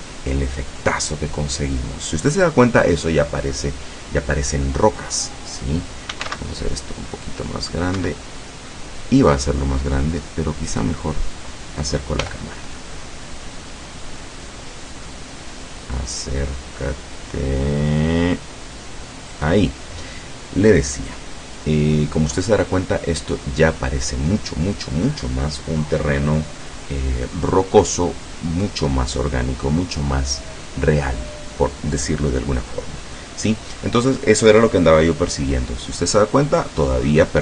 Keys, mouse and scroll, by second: 6.0-6.8 typing, 8.1 Escape, 10.8 right click, 12.3 g, 12.8 middle click, 19.4 click.